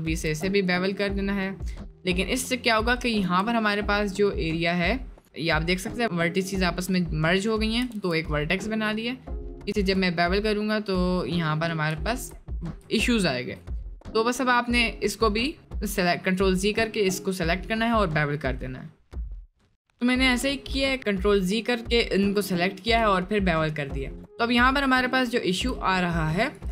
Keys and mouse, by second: 2.1 middle click, 2.5 middle click, 3.3 1, 8.0 ctrl+b, 12.1 ctrl+z, 14.1 middle click, 19.9 middle click, 21.0 middle click, 21.5 middle click, 24.2 click, 24.9 middle click, 25.5 shift+middle click, 26.5 right click.